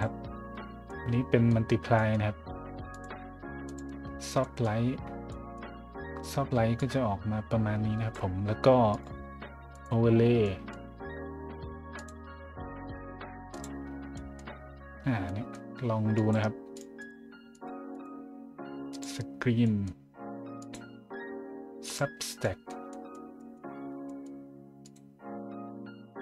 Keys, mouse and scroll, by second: 0.8-1.5 middle drag, 1.7 middle click, 1.9 middle drag, 2.9 click, 3.6 click, 4.4 middle click, 5.3 middle drag, 5.8 middle drag, 6.8-8.1 drag, 8.9 click, 9.7 click, 10.4 middle click, 11.9 click, 13.5 click, 14.1 middle drag, 15.3 middle drag, 16.1 click, 16.7 click, 17.0 click, 17.5 click, 17.9 click, 18.9 click, 19.6 middle click, 20.6 click, 21.8 click, 22.4 middle drag, 22.9 middle drag, 23.4 middle drag, 23.7 scroll down 1, 24.1 middle click, 24.8 click.